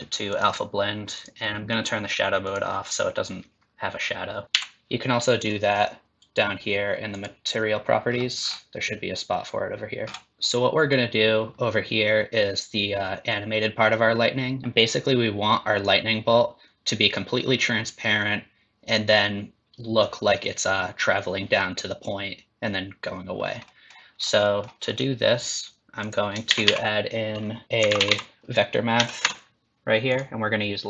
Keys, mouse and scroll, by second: 1.1 click, 4.5 n, 7.1 click, 8.1-10.0 scroll down 8, 10.0 scroll up 12, 23.7 middle click, 24.2 scroll down 4, 24.4 middle click, 26.0 click, 26.5 shift+a.